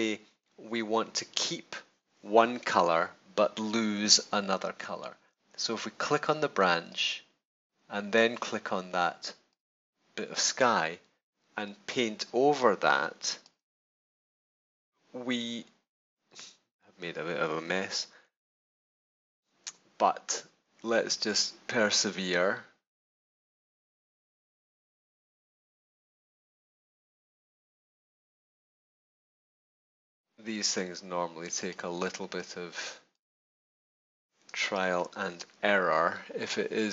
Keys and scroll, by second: 34.4 space.